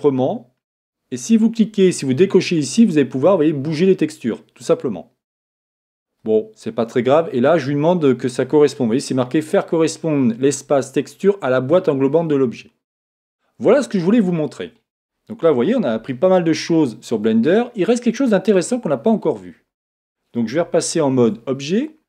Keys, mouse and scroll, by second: 1.3-4.7 drag, 14.1-17.9 middle drag, 21.2 shift+z.